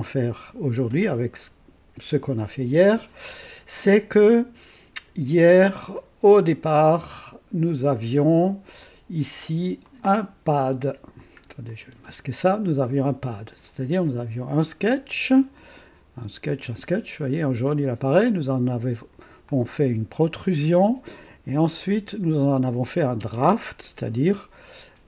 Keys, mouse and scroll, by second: 3.5 scroll down 2, 5.3 scroll down 2, 6.6 click, 7.0 space, 9.8 click, 10.6 typing, 11.7 click, 11.9 typing, 12.8 click, 15.5 click, 15.5 typing, 18.3-19.3 drag, 18.7 typing, 19.5-20.5 drag, 21.5 click, 23.2 space.